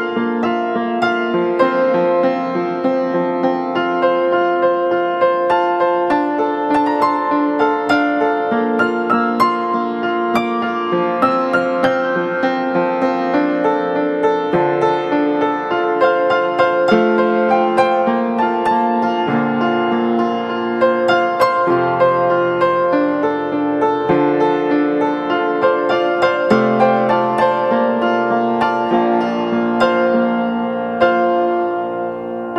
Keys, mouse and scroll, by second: 7.5 ctrl+t.